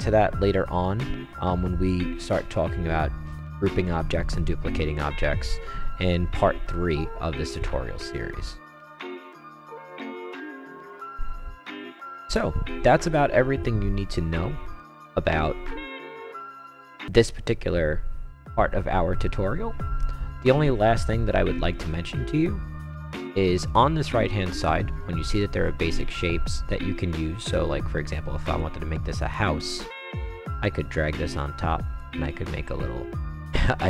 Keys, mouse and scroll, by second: 10.4 click, 11.0 click, 11.7-12.6 right drag, 12.9-13.6 right drag, 15.6-16.5 right drag, 17.6 scroll down 2, 18.3-19.2 scroll up 4, 19.5 middle click, 19.6 middle click, 21.7 click, 22.9 click, 28.5-28.9 right drag, 29.6-31.9 drag, 32.4 click, 33.1-33.7 right drag.